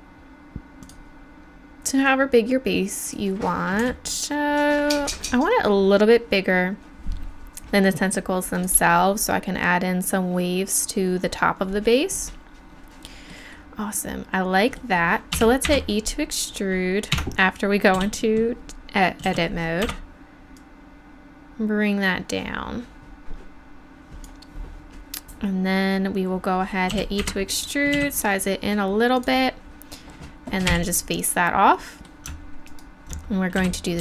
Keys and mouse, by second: 3.8 s, 15.3 e, 15.6 Escape, 17.1 Tab, 17.9 w, 19.3 e, 26.9 e, 27.9 s, 30.7 f, 33.6 e.